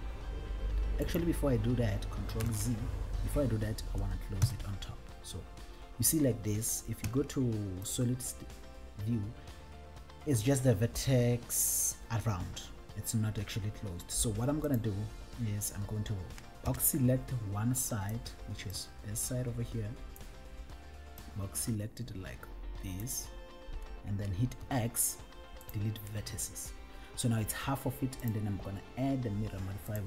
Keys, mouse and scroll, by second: 1.3 right click, 2.7 ctrl+z, 2.7 right click, 4.6 KP_7, 7.2 z, 14.8 click, 16.8 b, 17.2 click, 18.8-20.5 drag, 21.6-23.4 drag, 24.8 x, 28.4-30.0 drag.